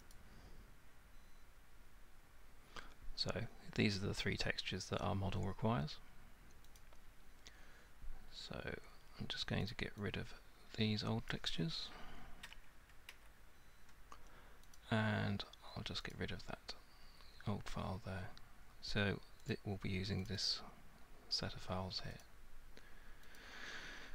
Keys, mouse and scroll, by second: 0.1 middle click, 0.1 right click, 6.8 click, 9.7 click, 11.3 click, 13.1 Delete, 14.8 click, 16.1 click, 17.0 Delete, 19.5 click, 20.3 click, 20.5 click, 22.2 click, 23.4 click.